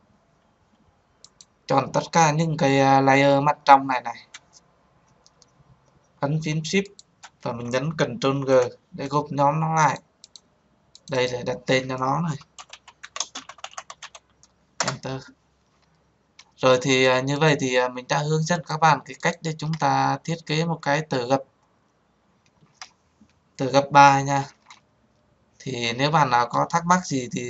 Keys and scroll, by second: 8.3 ctrl+g.